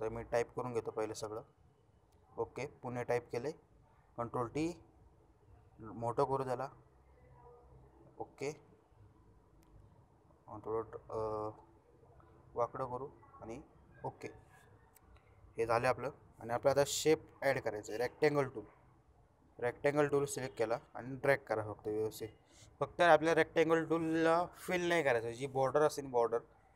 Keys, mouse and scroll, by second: 4.1 ctrl+t, 6.0-7.0 drag, 16.2-18.8 drag.